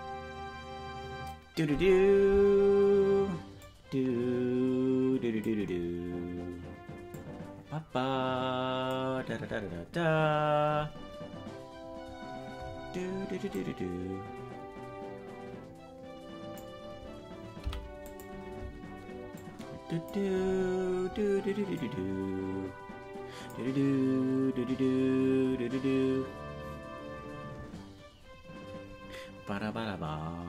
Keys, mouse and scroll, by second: 3.6-5.6 drag, 7.1-9.0 drag, 13.6-16.6 drag, 17.6 i, 19.4 click, 21.7-23.6 drag.